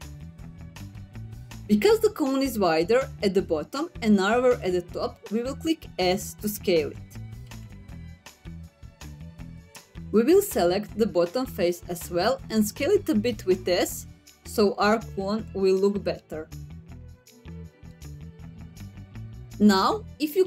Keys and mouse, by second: 3.8 s, 5.7-6.9 middle drag, 7.5 middle click, 8.1 s, 8.8 click, 9.3 middle click, 10.6 click, 15.8 s, 17.5 click, 17.9 middle click, 19.1 middle click.